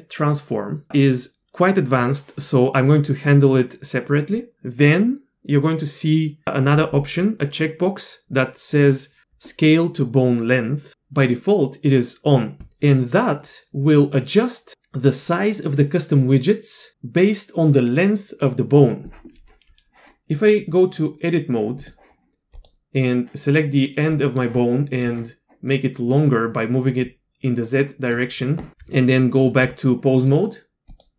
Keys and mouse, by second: 21.0-21.9 drag, 22.6 click, 24.1 drag, 26.1-28.1 drag, 28.8 Tab, 30.3-31.0 drag.